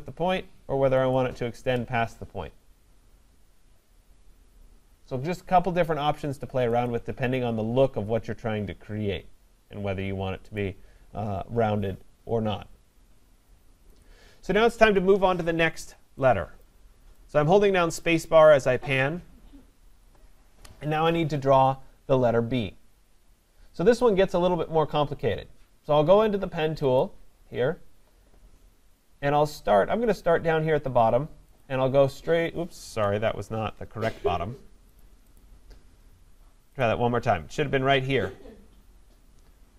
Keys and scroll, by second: 33.5 Escape.